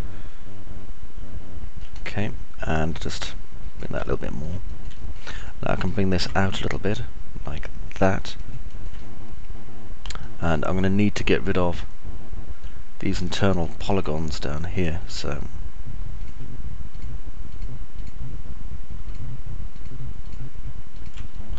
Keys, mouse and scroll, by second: 4.3 alt+click, 4.3 alt+middle click, 4.3 alt+right click, 4.8 click, 4.8 middle click, 4.8 right click, 6.8 right click, 9.3-10.3 alt+drag, 9.3-10.3 alt+middle drag, 9.3-10.3 alt+right drag, 10.4-12.8 alt+drag, 10.4-12.8 alt+middle drag, 10.4-12.8 alt+right drag, 14.3-15.3 alt+drag, 14.3-15.3 alt+middle drag, 14.3-15.3 alt+right drag, 16.9 ctrl+right click, 17.6 ctrl+right click.